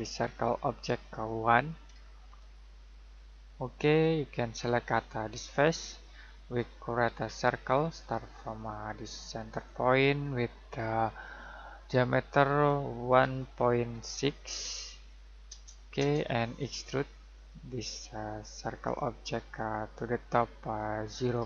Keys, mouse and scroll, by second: 2.2 typing, 3.8 click, 4.5-5.1 scroll down 1, 5.5 click, 7.1 c, 9.5 click, 13.1 typing, 14.2-14.9 typing, 15.4 Return, 17.3 click.